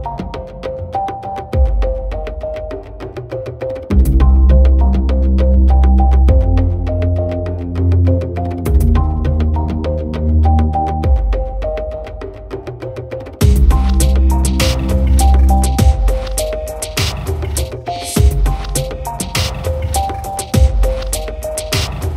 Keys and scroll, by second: 1.6 ctrl+t.